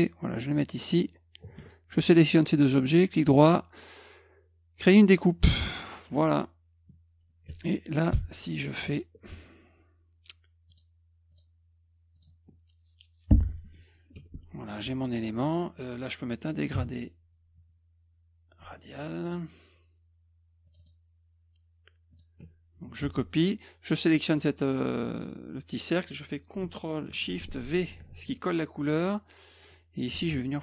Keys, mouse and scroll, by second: 1.6 shift+click, 2.2 right click, 4.8 click, 5.6 click, 8.1 ctrl+shift+l, 10.7 click, 11.3 click, 12.2 click, 14.2 F2, 14.7 click, 19.3 click, 20.7 click, 20.8 click, 22.1 click, 23.0 ctrl+c, 24.3 click, 27.9 ctrl+shift+v, 29.5 click.